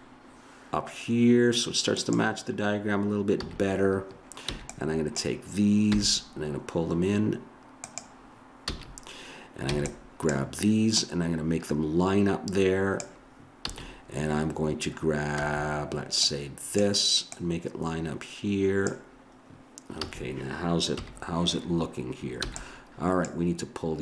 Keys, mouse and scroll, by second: 3.4 a, 4.5 b, 5.9 g, 8.7 a, 9.7 b, 10.9-12.1 drag, 13.6 a, 15.4 b, 17.3-18.6 drag, 20.0 a, 21.0 KP_1, 22.5 b.